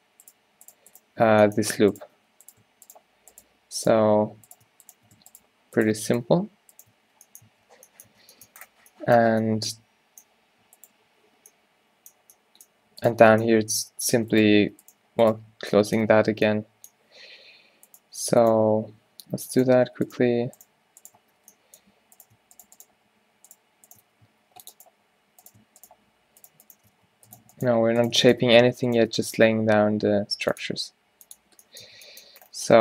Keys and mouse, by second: 1.3-4.8 drag, 1.3 b, 2.3 f, 4.2 f, 5.4 shift+right click, 6.0 f, 7.1 f, 7.5 Tab, 8.2 Tab, 8.8 z, 13.5 click, 13.7 e, 16.1 f, 17.4 ctrl+z, 18.8 f, 21.4 f, 24.2 f, 24.5 ctrl+r, 27.0 f, 28.5 f, 29.5 w, 32.1 Tab.